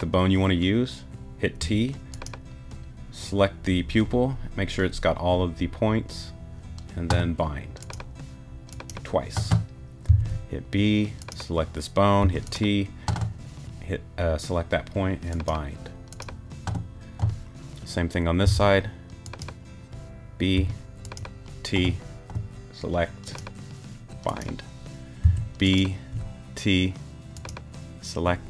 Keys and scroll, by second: 1.6 t, 10.1 b, 12.2 t, 18.4 b, 20.5 t, 25.2 b, 26.1 t.